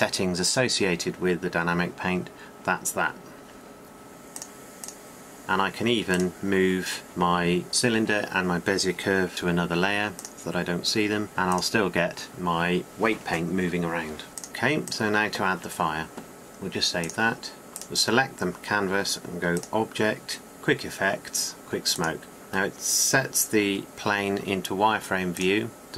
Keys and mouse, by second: 6.1-9.3 drag, 9.3-10.3 middle drag, 9.3 m, 11.7-17.7 drag, 18.0-19.8 drag, 23.9-25.7 drag.